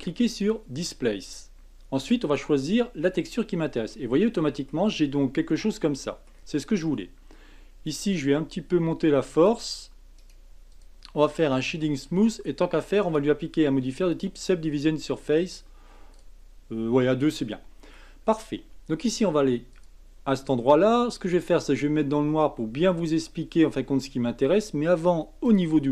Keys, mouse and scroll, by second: 2.2-3.9 drag, 3.9-5.0 middle drag, 5.0 scroll up 3, 5.5-6.6 middle drag, 6.6-8.2 scroll down 1, 8.2-10.2 drag, 10.2-11.3 right drag, 11.3-13.0 middle drag, 13.0-16.9 drag, 17.2-19.9 middle drag, 19.9 click, 21.3-24.3 drag, 25.4 click.